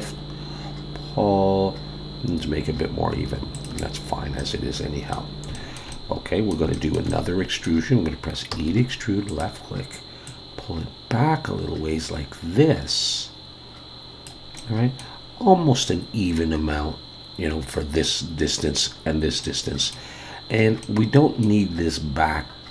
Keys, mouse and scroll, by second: 4.0-4.4 scroll down 1, 4.4 middle click, 5.5 shift+middle click, 5.9 middle click, 6.7 shift+middle click, 7.1 middle click, 8.5 e, 10.3 click, 14.6 middle click, 19.4 middle click, 20.5-20.8 scroll down 1, 20.8 middle click.